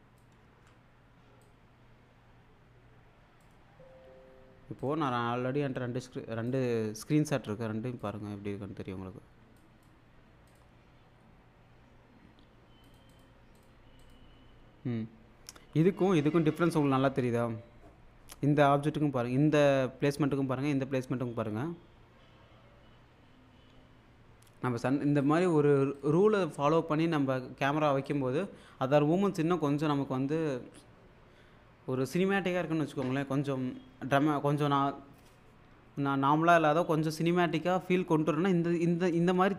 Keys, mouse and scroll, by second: 0.4 shift+super+s, 3.7 click, 4.8 click, 6.5 click, 8.0 click, 9.6 click, 12.9 click, 25.2 click, 28.1 click.